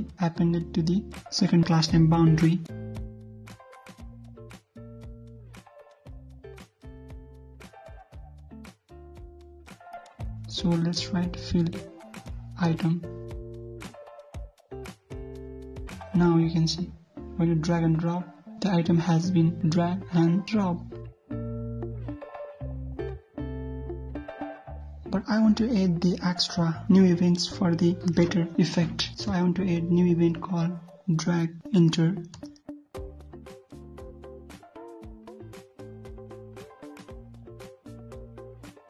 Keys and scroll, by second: 8.5 ctrl+c, 11.8 ctrl+v, 14.7 ctrl+s, 15.4 alt+Tab, 15.8 ctrl+F5, 29.6 alt+Tab.